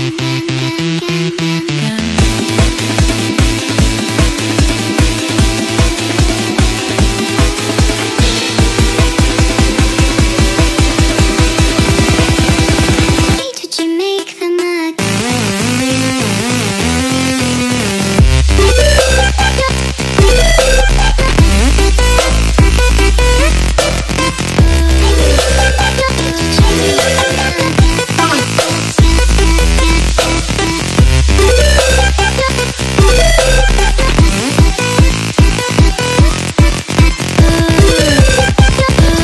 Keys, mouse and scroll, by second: 0.3 click, 1.9 click, 2.9 click, 4.3 click, 5.7 click, 7.1 click, 7.4 click, 8.3 click, 8.6 click, 9.8 click, 10.1 ctrl+click, 10.3-10.6 ctrl+click, 10.5 ctrl+click, 12.2 click, 15.4 click, 16.0 click, 16.5 click, 17.4 click, 18.0 click, 18.6 click, 19.4 click, 19.6 ctrl+space, 19.9 ctrl+click, 20.1 ctrl+space, 20.4 ctrl+click, 20.5 ctrl+space, 20.9 click, 21.4 click, 21.9 click, 23.2 click, 28.6 click, 33.0 click, 34.0 click, 34.4 click, 36.4 click.